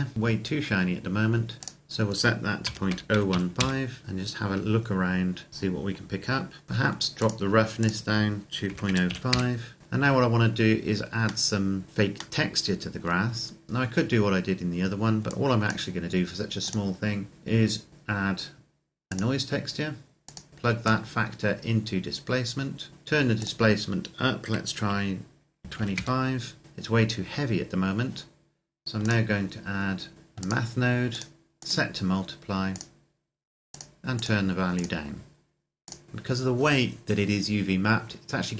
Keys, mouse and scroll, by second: 0.1-1.6 scroll up 1, 1.6 click, 2.3 KP_Decimal, 2.6 KP_0, 2.8 KP_1, 3.0 KP_5, 3.4 KP_Enter, 4.0 middle click, 5.5-6.6 scroll down 2, 6.6-7.0 scroll up 1, 7.0 click, 8.5 KP_Decimal, 8.7 KP_0, 9.0 KP_5, 9.3 KP_Enter, 9.8-11.0 scroll down 1, 11.4 middle click, 15.2 click, 19.2 click, 25.3 KP_2, 25.5 KP_5, 25.8 KP_Enter, 26.6-27.4 scroll up 1, 28.8 click, 30.6 click.